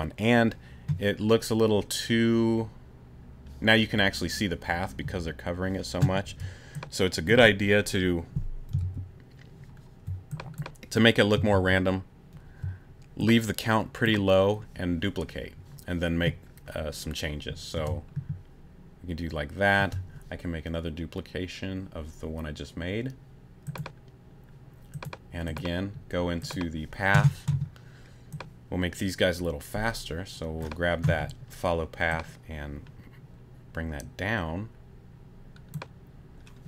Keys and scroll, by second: 6.3 space, 8.8 super+z, 11.5 super+z, 17.7 space, 19.8 space.